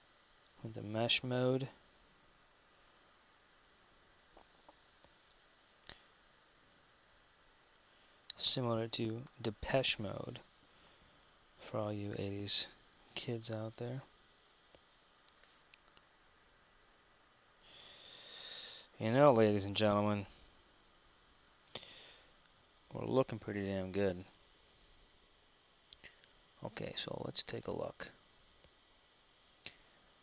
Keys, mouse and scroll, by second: 0.7 KP_1, 5.5 Tab, 11.9 Tab, 16.2 KP_1, 16.9 KP_3, 18.1 Tab, 19.7 z.